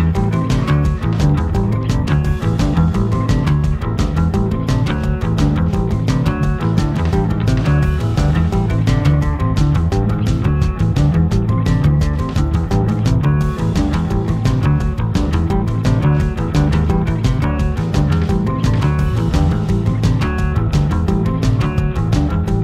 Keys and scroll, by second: 6.3 a, 8.6 super+j, 9.4 v, 16.5 v, 18.9-19.9 typing.